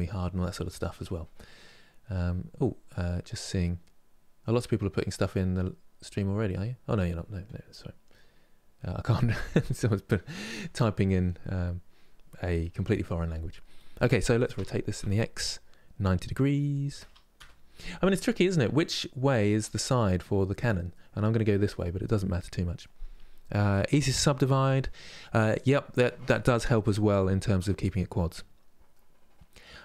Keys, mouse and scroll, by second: 17.5-23.6 middle drag, 28.6-29.8 middle drag.